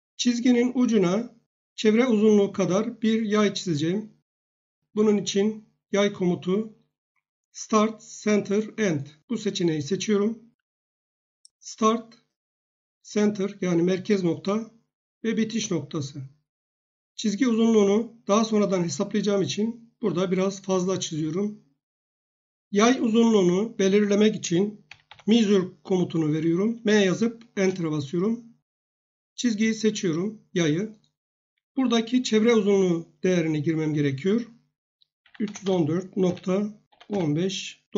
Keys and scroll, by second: 24.6-25.6 typing, 27.5 Return, 35.0-37.9 typing.